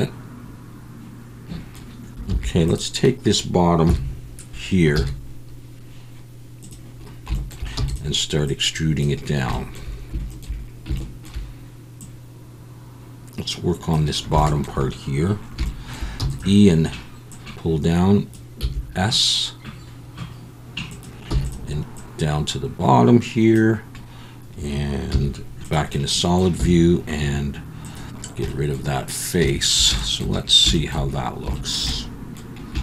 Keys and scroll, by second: 2.3 3, 3.9 KP_1, 4.9 z, 7.8 e, 16.2 e, 18.6 s, 21.3 e, 25.1 z, 26.6 x.